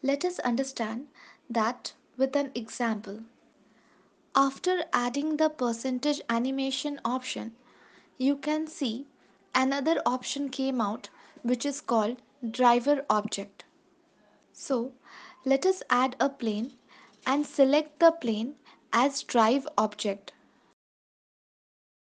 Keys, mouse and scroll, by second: 15.8 shift+a, 17.4 ctrl+s, 18.5 click, 19.5 click.